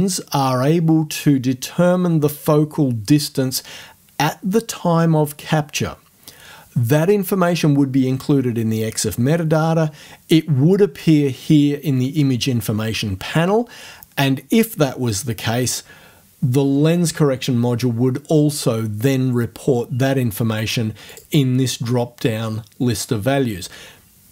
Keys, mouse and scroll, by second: 21.1 click.